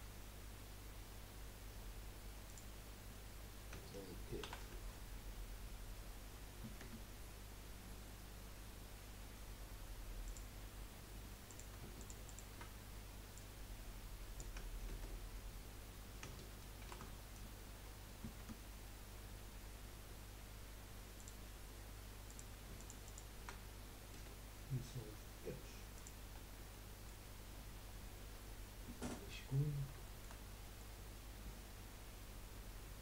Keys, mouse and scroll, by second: 4.4 ctrl+r, 10.9 scroll up 1, 11.5 click, 12.0 alt+shift+click, 12.2 alt+shift+click, 13.3 click, 14.9 ctrl+z, 16.8 ctrl+r, 21.5-22.3 scroll up 2, 22.3 click, 23.0 alt+shift+click, 24.1 Delete, 26.4-26.7 scroll down 1, 26.7 middle click, 27.6 scroll down 2, 27.9-29.5 middle drag, 29.5-30.0 scroll up 1, 30.0-31.9 shift+middle drag, 31.9-32.2 scroll up 3.